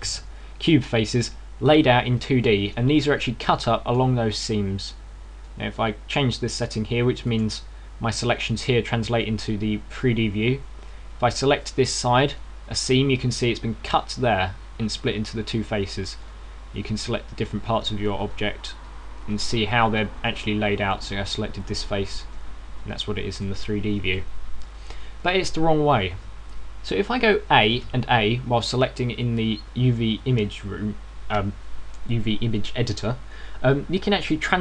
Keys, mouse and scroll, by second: 0.9 ctrl+z, 1.4 right click, 1.9 right click, 2.4 right click, 2.9 right click, 10.0 click, 10.0 right click, 12.7-13.2 scroll up 2, 13.2 shift+middle click, 17.1 right click, 17.7 right click, 19.1 shift+right click, 19.6 shift+right click, 20.1 shift+right click, 20.7 shift+right click, 22.6 right click, 23.1 shift+right click, 24.2 click, 27.0 scroll down 1, 31.2 2.